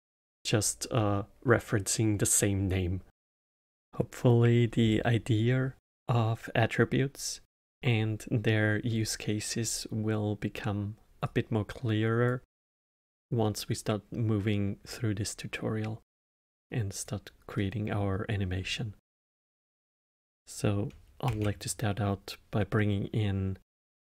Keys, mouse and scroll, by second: 3.6-6.6 middle drag, 11.2 drag, 12.8-14.8 middle drag, 14.8-17.5 drag, 17.5-20.5 middle drag, 21.2 shift+a.